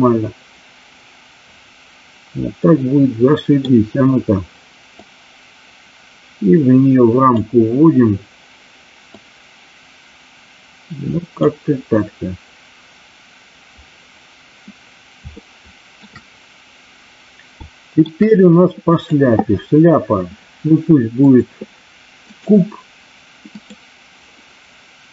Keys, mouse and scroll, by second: 5.0-7.3 drag, 9.0-11.3 drag, 15.5 shift+middle click, 17.7 shift+middle click, 19.0 click, 21.2-22.5 drag, 23.6 click.